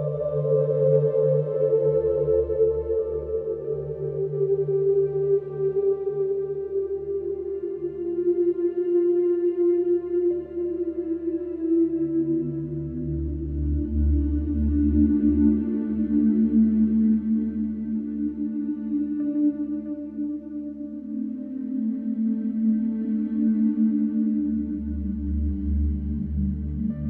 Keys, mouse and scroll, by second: 0.3-3.1 drag, 6.5 click, 11.0 click, 14.0 click, 15.0 click, 16.1 click, 18.3 g.